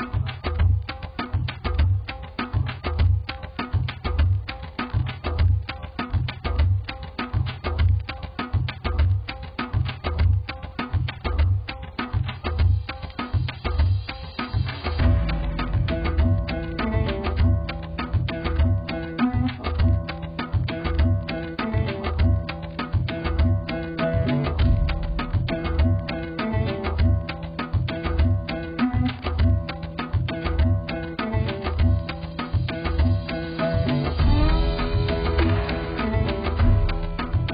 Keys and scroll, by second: 21.9 ctrl+t.